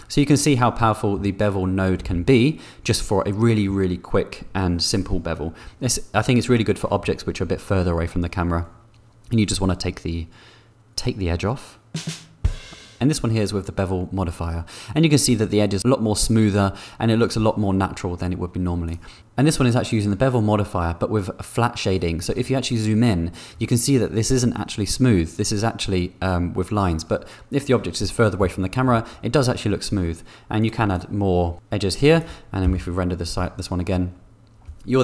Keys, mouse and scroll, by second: 0.7 click, 2.3 4, 18.8 click, 28.4 middle click, 30.6 click.